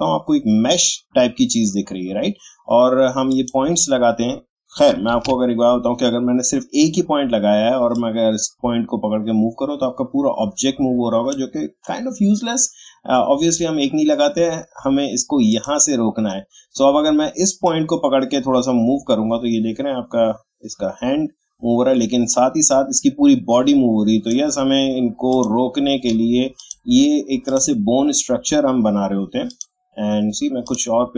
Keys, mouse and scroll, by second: 3.3 click, 7.9-13.7 drag, 15.5-31.1 drag.